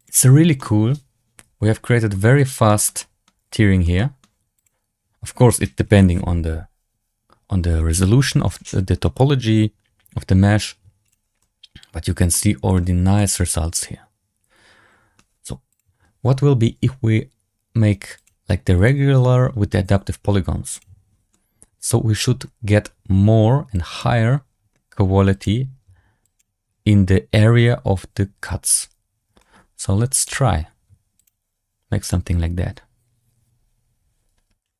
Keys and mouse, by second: 0.5 middle drag, 0.7-1.1 drag, 0.7-1.1 right drag, 1.1-2.0 middle drag, 2.6 shift+middle drag, 2.9 middle drag, 3.3 z, 3.9 middle drag, 4.5 click, 11.2 drag, 11.3-12.0 middle drag, 12.2-12.6 middle drag, 13.1-15.1 middle drag, 18.1-18.8 drag, 20.7 click, 21.2 middle click, 23.6 click, 25.2 click, 26.1 click, 29.3 shift+click, 30.0 click, 31.1 click, 31.9-34.5 drag.